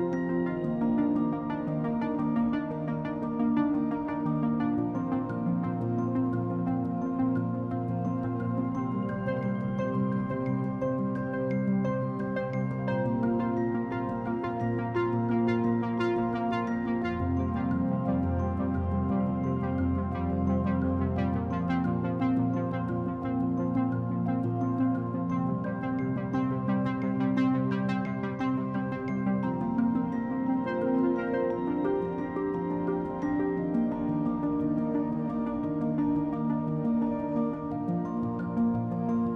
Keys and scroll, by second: 18.4-20.0 typing.